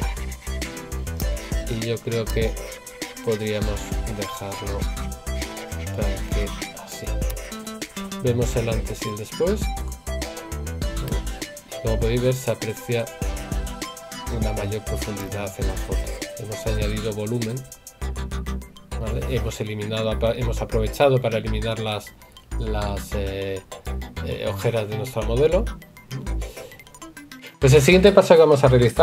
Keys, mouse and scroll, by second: 13.3 right click.